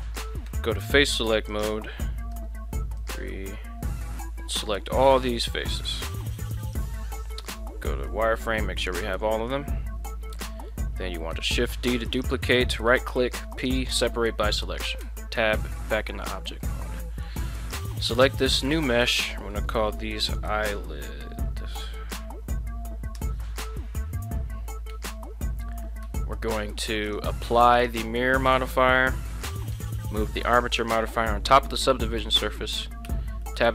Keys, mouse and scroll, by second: 0.5 3, 1.5 right click, 2.3 c, 6.6 right click, 7.0 z, 7.4 z, 8.1-9.5 middle drag, 9.6 z, 10.1 middle click, 11.3 shift+d, 12.1 click, 13.1 p, 15.0 Tab, 15.6 middle click, 16.0 middle click, 17.0 middle click, 17.6 right click, 18.8-23.9 drag, 24.9 Tab, 26.0 Tab, 27.7 click, 28.5 ctrl+a, 30.1-30.6 drag, 32.4 shift+middle click, 33.0 Tab, 33.4 middle click.